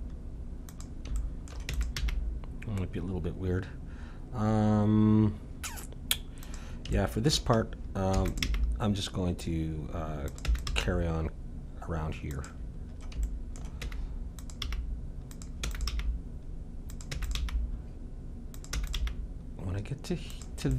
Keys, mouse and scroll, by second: 1.1-3.0 middle drag, 1.7 e, 2.0 g, 6.9-9.2 middle drag, 8.1 e, 8.4 g, 10.4 e, 10.7 g, 12.9 middle click, 13.8 e, 14.6 g, 15.6 e, 15.9 g, 17.1 e, 17.4 g, 18.7 e, 19.0 g.